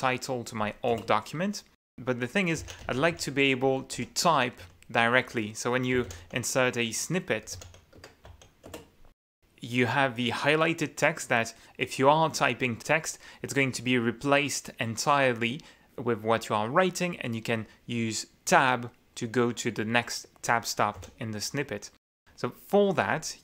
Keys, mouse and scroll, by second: 1.2 Return, 2.6-3.9 typing, 4.2 Escape, 4.9 u, 6.1-8.6 typing, 9.0 Return, 21.6 u.